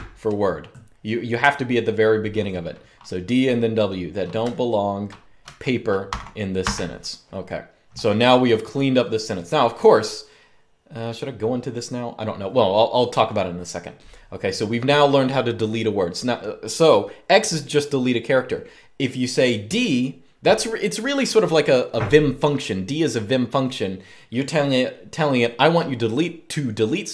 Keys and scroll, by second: 4.1-6.3 typing.